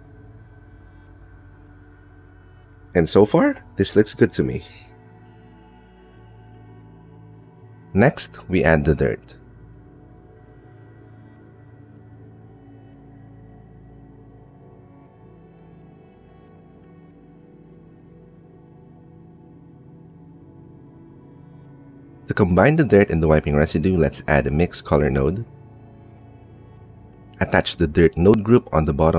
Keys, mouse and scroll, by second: 0.8 click, 2.8 click, 7.3 click, 7.6 click, 10.1 click, 11.5 click, 12.4 click, 12.6 Tab, 12.8 middle click, 13.5 click, 14.2 middle click, 14.8 click, 15.5-17.4 middle drag, 15.6 Tab, 17.6-19.8 middle drag, 19.8 click, 20.8 g, 21.9 click, 22.0 shift+middle click, 22.6 shift+a, 26.3-27.9 drag, 28.1 middle click, 28.6-29.1 drag.